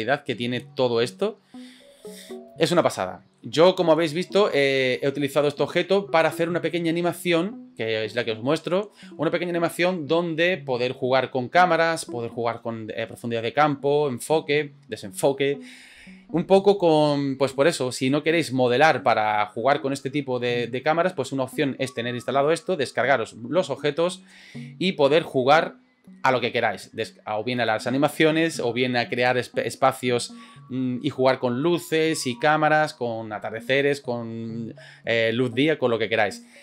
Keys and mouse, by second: 2.6 shift+middle click, 3.6-4.0 middle drag, 4.2 shift+middle drag, 5.0 middle click, 5.5-5.8 shift+middle drag.